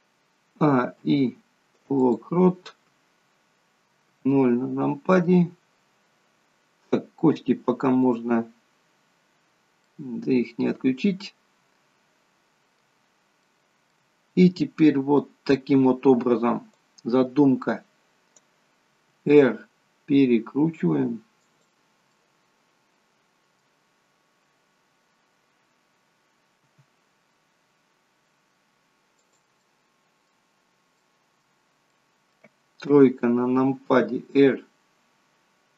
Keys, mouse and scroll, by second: 0.5 a, 0.9 i, 4.0 KP_0, 9.3 scroll up 3, 9.8 middle click, 13.4 middle click, 16.9 click, 19.1 r, 22.0 middle click, 26.6 r, 29.6 middle click, 30.4 scroll down 2, 31.0 middle click, 31.8 middle click, 32.8 KP_3, 33.9 r.